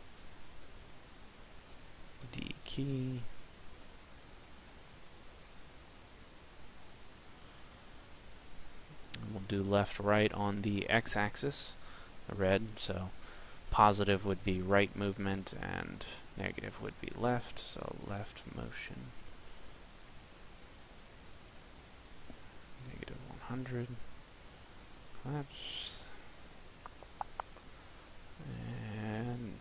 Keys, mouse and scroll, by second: 8.1 click, 27.6 middle click, 27.6 click.